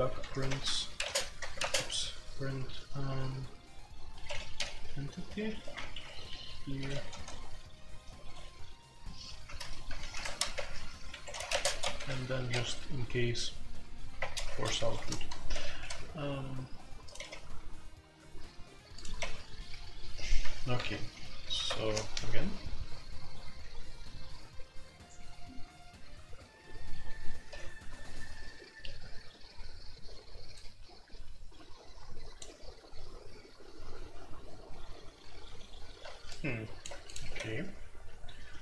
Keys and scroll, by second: 0.0-2.0 typing, 4.2 Escape, 4.5-8.2 typing, 5.7 shift+Return, 9.4-12.6 typing, 11.1 Escape, 14.2-17.7 typing, 19.1 typing, 21.4 alt+p, 21.7 Return, 21.7 c, 21.7 q, 37.2 q.